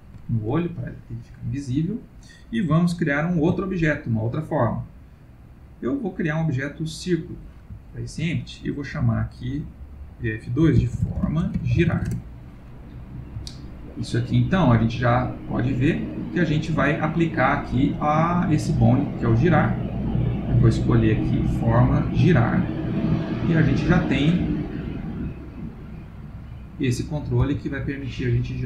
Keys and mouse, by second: 0.5 ctrl+middle click, 1.3 middle click, 3.3 shift+a, 7.8 ctrl+middle click, 9.0 F2, 11.9 r, 13.4 ctrl+middle click, 15.7 click, 19.7 click, 20.7 click, 22.7 ctrl+middle click, 23.1 middle click, 25.4 click, 25.9 click, 27.4 click, 27.4 r.